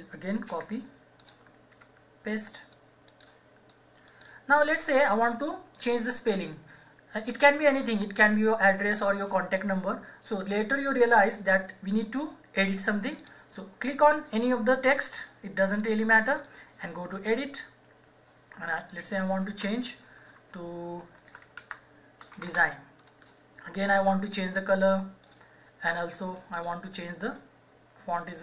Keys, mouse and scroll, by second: 0.5 ctrl+c, 1.2 click, 1.8 ctrl+v, 2.7 click, 3.1 right click, 3.7 click, 4.1 right click, 5.2 click, 13.2 click, 19.5 space, 21.0-22.9 typing, 23.8 click.